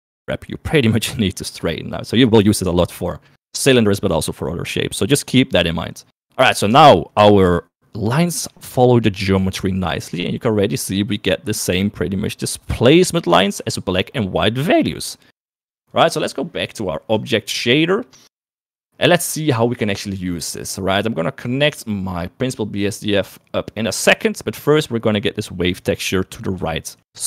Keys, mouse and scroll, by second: 5.3 middle click, 6.3 middle click, 6.9 Tab, 7.3 KP_1, 7.9 KP_3, 8.6 shift+middle click, 13.1 middle click, 13.6 shift+middle click, 15.8-17.0 drag, 18.1 middle click, 18.9 middle click, 22.6 click, 24.0 middle click, 26.7 shift+middle click.